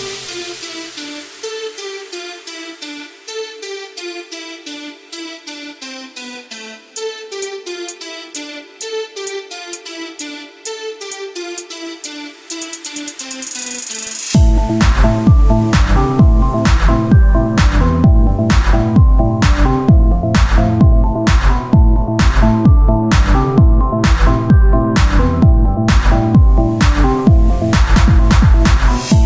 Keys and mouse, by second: 0.1 click, 0.8-2.1 drag, 2.1-3.4 middle drag, 3.4 KP_1, 4.1 z, 5.3 r, 6.2 shift+d, 7.6-11.5 drag, 8.4 z, 11.6 Tab, 12.3 KP_1, 12.8 z, 16.0 Tab, 16.2 a, 19.2 Tab, 29.1 a.